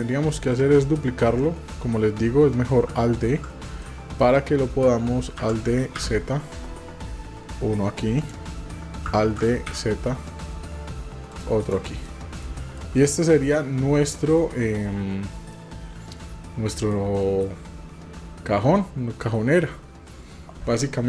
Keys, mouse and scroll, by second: 3.8 middle click, 5.4 alt+d, 9.3 alt+d, 12.1 middle click, 12.6 shift+middle click, 13.0 middle click, 14.2 shift+middle click, 15.5-16.9 middle drag, 17.2 shift+middle click, 18.8-20.1 middle drag.